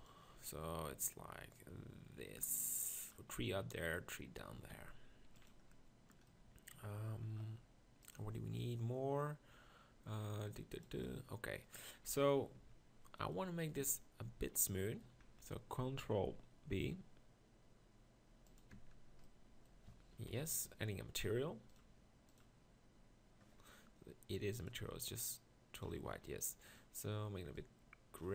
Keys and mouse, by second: 4.5 s, 12.1 KP_1, 13.7 Tab, 13.8 Tab, 14.3 Tab, 14.9 middle click, 16.3 ctrl+b, 18.8 Tab, 20.3 KP_1, 26.0 KP_1.